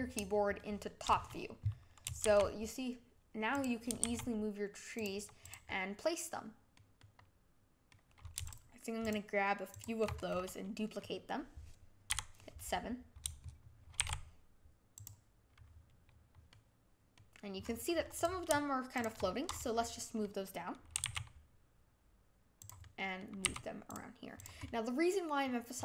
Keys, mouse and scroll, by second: 0.5-2.2 shift+middle drag, 2.2 shift+d, 4.0 shift+d, 5.4 click, 5.6-8.4 middle drag, 8.4 shift+click, 9.0 shift+click, 9.7 shift+click, 10.0 scroll down 4, 10.3-12.1 middle drag, 12.1 KP_7, 14.0 shift+d, 16.4-17.6 middle drag, 17.6-18.1 scroll up 4, 18.1 click, 18.9 shift+click, 19.2-20.9 middle drag, 20.9 g, 22.8 middle click, 23.4 g, 24.3 click, 24.5 scroll up 1, 24.6-25.7 middle drag, 25.7 click.